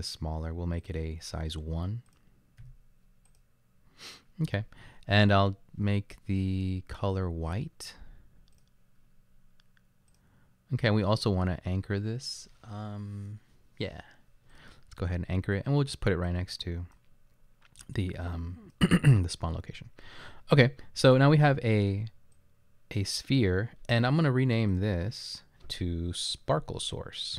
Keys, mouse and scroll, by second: 2.6 1.